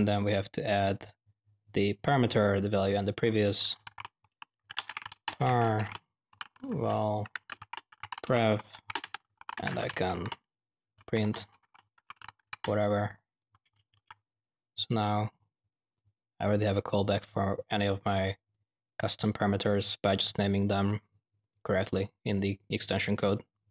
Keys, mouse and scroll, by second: 0.0-0.3 typing, 3.6-12.8 typing, 13.3 click, 14.6 typing, 14.9-17.9 drag, 18.5 click, 21.3 click, 22.7 click, 23.6 typing.